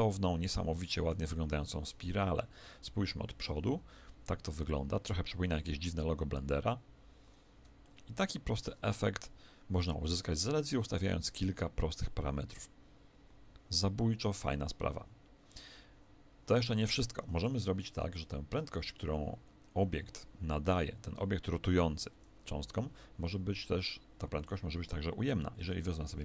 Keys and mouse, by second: 1.9 KP_1, 7.8-22.1 middle drag, 22.1 Escape, 24.3 click.